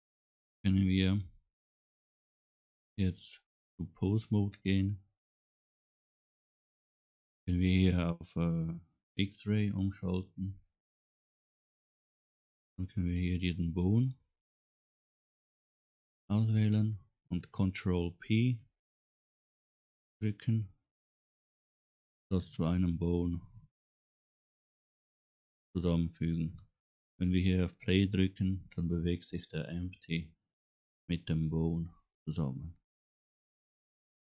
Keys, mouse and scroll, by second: 3.8-5.0 drag, 10.1 click, 12.2 scroll up 2, 12.8 middle click, 14.0 click, 14.6 scroll down 2, 15.9 middle click, 19.0 ctrl+p, 27.6 click.